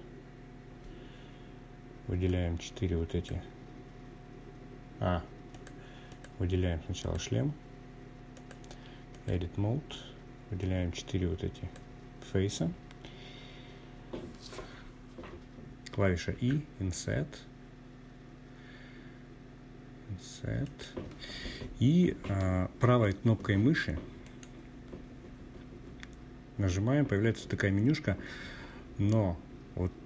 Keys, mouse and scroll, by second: 0.2-2.9 drag, 3.5-4.3 drag, 4.9 click, 6.3-7.3 drag, 8.5-10.3 drag, 11.2-13.1 scroll up 3, 14.3 i, 18.6 click, 22.2-30.0 right drag.